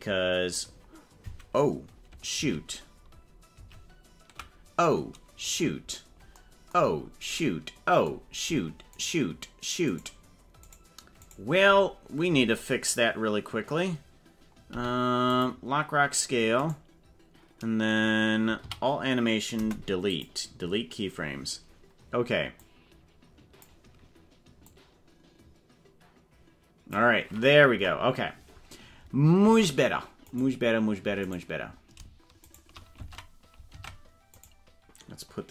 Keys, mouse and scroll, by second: 2.5 ctrl+z, 3.7 ctrl+z, 5.5 right click, 6.9 scroll down 5, 8.9 shift+right click, 9.9 right click, 10.7 shift+right click, 11.3 shift+right click, 14.7 i, 16.7 right click, 18.7 a, 19.5 Delete, 22.7-23.7 drag, 24.7-26.9 drag, 27.7 KP_0, 29.5 ctrl+Tab, 31.2 right click, 32.4 shift+right click, 33.7 ctrl+Tab, 34.5 right click.